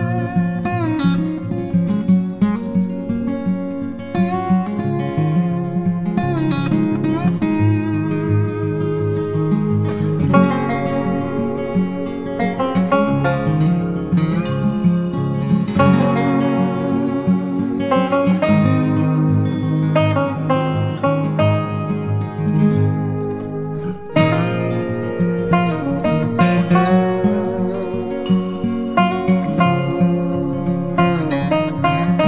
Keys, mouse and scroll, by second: 26.1-26.6 typing.